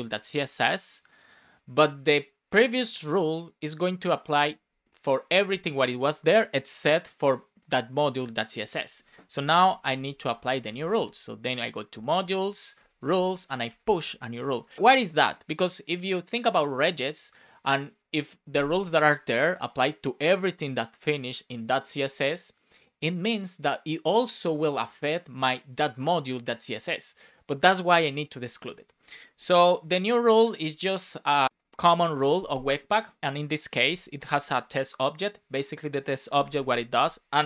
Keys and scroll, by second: 11.8 Return, 14.3 shift+9, 29.7 shift+[, 30.1 Return, 33.8 shift+;, 34.2 space, 36.5 space, 36.7 BackSpace.